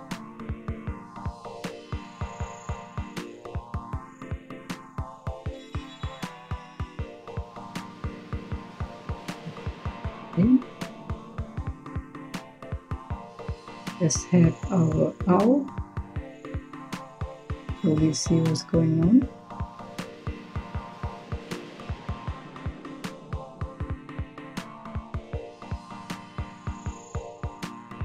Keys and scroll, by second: 0.3 c, 13.1 Tab, 15.2-16.4 typing.